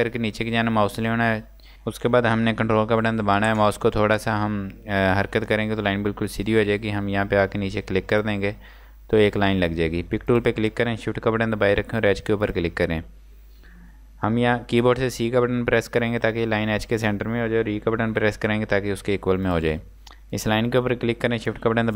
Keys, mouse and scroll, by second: 8.1 click, 10.3 click, 12.4 shift+click, 15.8 c, 18.1 e, 19.4 click.